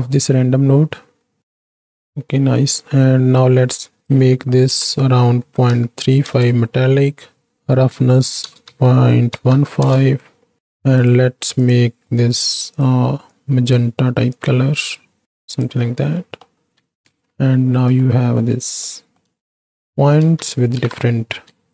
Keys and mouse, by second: 2.4 middle click, 4.1-6.3 drag, 7.5-9.8 drag, 11.6-12.8 drag, 16.3 middle click, 17.1 ctrl+space, 18.0 shift+click, 18.8-19.2 drag, 19.4 shift+click, 20.6 shift+Right, 20.9 shift+Left, 21.5 space.